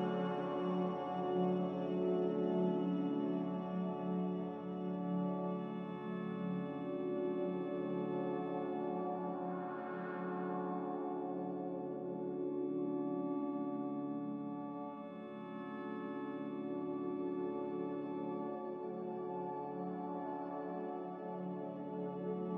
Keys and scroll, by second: 2.8 3, 5.1 2, 5.9 m, 10.1 m, 10.9 Escape, 11.0 Escape, 11.1 Escape, 16.4 a.